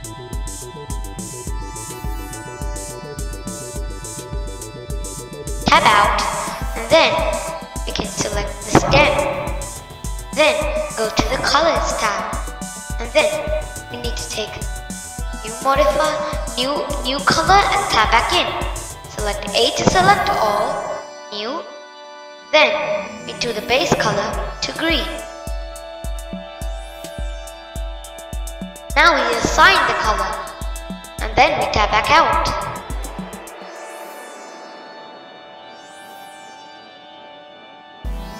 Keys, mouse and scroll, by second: 0.4-0.9 scroll down 2, 0.9-2.4 middle drag, 2.4-2.9 scroll down 2, 2.9-4.1 middle drag, 4.1 Tab, 5.7 click, 7.1 click, 9.2-10.8 scroll down 1, 10.8 click, 15.3-17.3 drag, 17.3 b, 21.6-22.7 scroll down 2, 27.7-29.0 scroll up 2, 30.7 Tab, 31.3-33.3 middle drag, 33.3-33.8 scroll down 2, 34.5-37.2 middle drag, 37.2 scroll down 2, 37.9-38.3 middle drag.